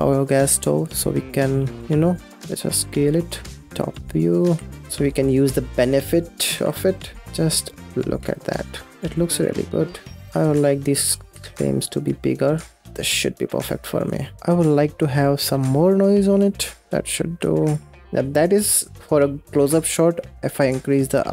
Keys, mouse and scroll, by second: 0.6 click, 1.5-1.8 scroll down 4, 1.8 g, 2.3 scroll up 4, 2.6 s, 3.7 g, 3.9 click, 4.1 scroll up 3, 4.3 g, 5.5 middle click, 6.0 scroll down 3, 6.4 g, 7.2-7.7 middle drag, 7.7 scroll up 4, 8.0 space, 8.5-10.3 middle drag, 10.6 click, 10.7-11.1 scroll down 8, 10.9 shift+click, 11.1 s, 11.6 g, 12.0 scroll down 2, 12.1 middle drag, 12.3 click, 12.4 middle drag, 12.6 ctrl+s, 12.6 scroll down 1, 12.7 middle click, 12.8 space, 12.9 click, 13.2 scroll down 1, 13.3 scroll up 9, 13.6 shift+click, 14.4-16.8 drag, 16.8 middle click, 17.3 shift+click, 18.0-19.6 scroll up 8, 19.6 middle click, 20.0-20.7 scroll up 5, 20.7 click.